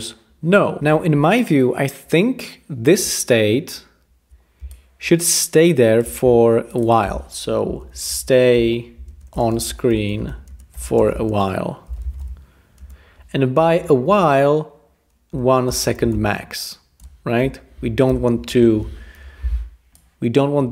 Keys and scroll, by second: 7.4-13.6 typing, 15.0-18.5 typing, 19.1 Home.